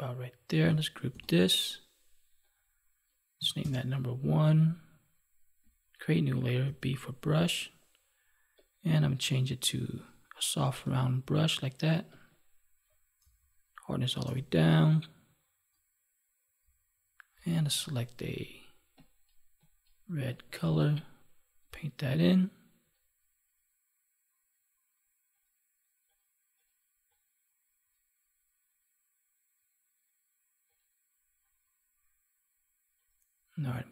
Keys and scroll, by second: 1.0 ctrl+g.